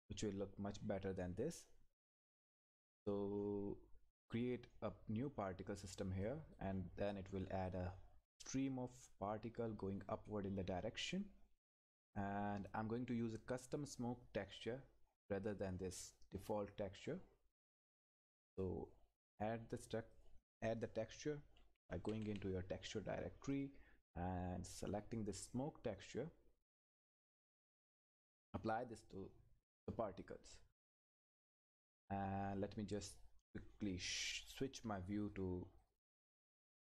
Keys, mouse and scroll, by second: 4.3 click, 7.1-8.9 scroll down 1, 12.1 click, 15.9 click, 18.3 click, 21.3-22.7 typing, 23.5 click, 26.7 click, 31.8 click, 35.3 click.